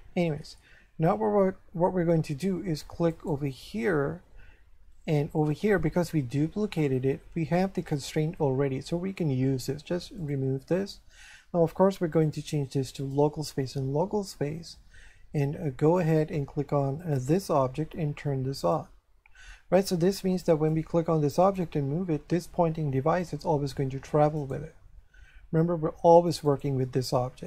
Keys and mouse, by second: 3.1 right click, 5.4 shift+middle click, 10.2 click, 12.1 click, 15.9 click, 17.0 click, 18.6 click, 20.7 right click, 24.4 right click, 26.4 right click.